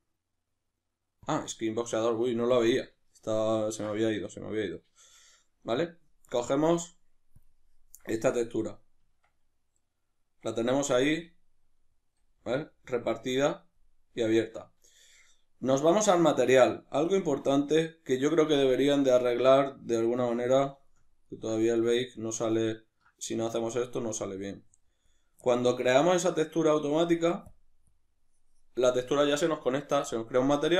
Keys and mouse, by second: 3.1-6.3 ctrl+middle drag, 6.3-17.1 drag, 9.0 Tab, 11.1 a, 14.4 Tab, 17.9-24.3 middle drag, 24.3-25.5 drag, 25.5-27.5 ctrl+middle drag, 27.9 click.